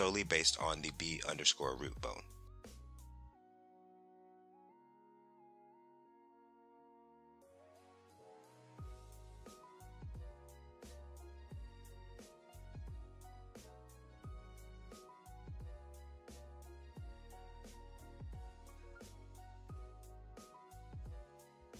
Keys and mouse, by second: 1.2 r, 3.2 right click, 4.1 click, 4.8 r, 5.5 right click, 7.0 r, 7.8 right click, 8.4 click, 9.0 r, 10.1 click, 10.6 r, 12.2 click, 12.7 r, 13.3-14.3 right drag, 14.3 click, 15.5 right click, 15.5 r.